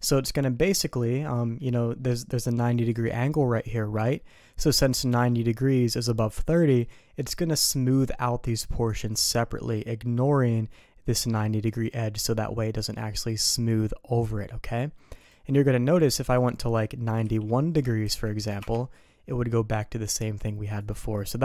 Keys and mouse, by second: 0.6 middle click, 1.4 middle click, 6.8 middle click, 9.6 middle click, 13.2 click, 15.2 click, 16.4-19.1 drag, 20.8 click, 21.0 click.